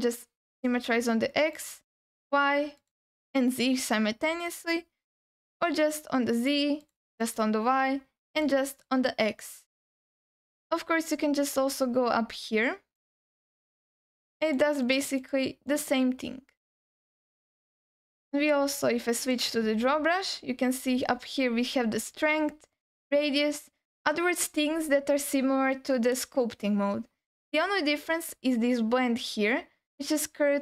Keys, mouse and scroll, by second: 1.5 click, 2.8 click, 4.5 click, 5.5 click, 6.4 click, 6.8 click, 7.2 click, 8.4 click, 10.8 scroll down 3, 11.5-12.1 scroll down 4, 12.9 click, 13.8 click, 14.4 click, 14.8 click, 15.2 click, 15.7 click, 16.5-17.1 scroll up 4, 17.5-18.1 scroll up 3, 19.1 click, 20.2-21.1 scroll down 2, 21.1-21.8 scroll down 2, 21.8-23.1 scroll up 5, 28.3-29.1 scroll up 2.